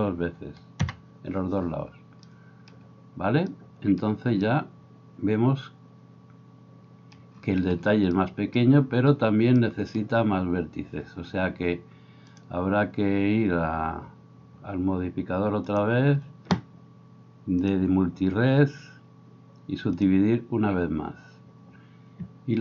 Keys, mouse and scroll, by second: 15.8-17.6 middle drag, 17.6-22.6 drag.